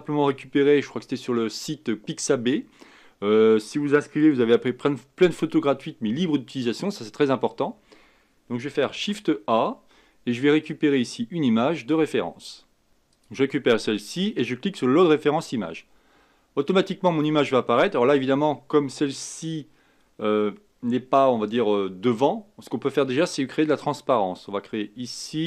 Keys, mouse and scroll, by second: 8.9 shift+a, 25.2 click.